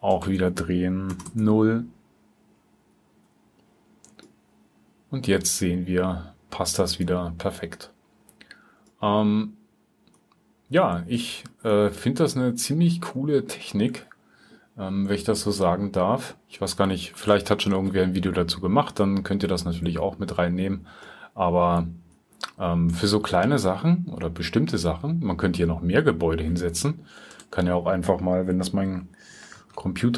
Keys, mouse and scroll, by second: 10.4-11.1 drag, 11.5 click, 12.8-21.0 drag.